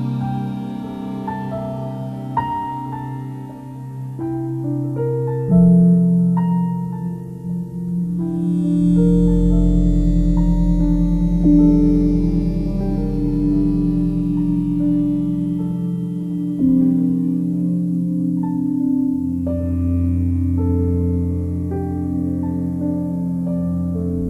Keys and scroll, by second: 4.7 ctrl+u.